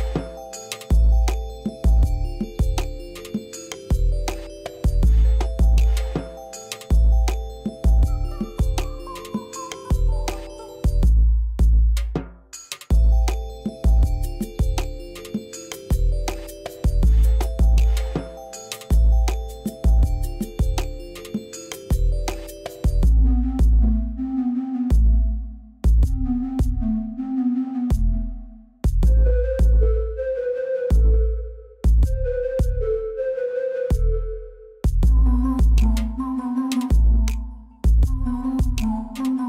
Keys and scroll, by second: 0.3 2, 1.1 Return, 8.5 ctrl+c, 10.4 ., 11.9 Return, 15.0 ctrl+v, 34.1 shift+a, 36.6 r, 36.9 y, 37.2 9, 37.4 0, 37.6 Return, 38.5 Tab.